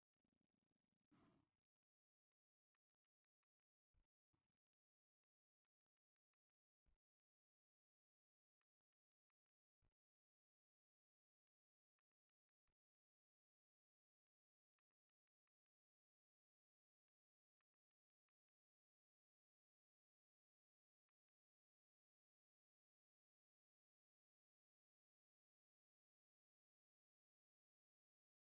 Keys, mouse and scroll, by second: 0.5 click, 0.9 click, 2.1-4.9 drag, 6.3-7.7 drag, 8.1 click, 8.7-9.8 drag, 10.2 middle click, 11.2 shift+v, 13.4 click, 14.6 ctrl+r, 15.4 right click, 16.7-18.6 drag, 21.0-22.5 middle drag, 22.8 click, 23.4 click, 25.5-26.5 drag, 26.8 middle click, 27.9 shift+v, 28.3 click.